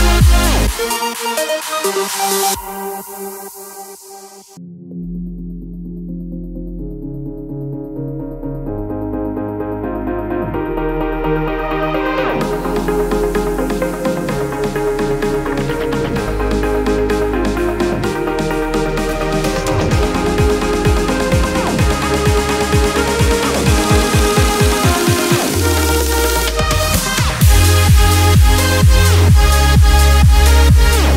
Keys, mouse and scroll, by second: 0.6-3.6 drag, 4.0 alt+scroll up 1, 6.8 click, 9.1 b, 10.0 alt+right click, 12.0 typing, 15.2-16.8 drag, 15.2 typing, 18.9-23.3 drag, 23.3-28.0 alt+shift+drag, 28.4 alt+scroll down 1, 29.1 click, 29.4 space, 29.6 click, 29.9 space, 30.2-30.6 alt+scroll up 1.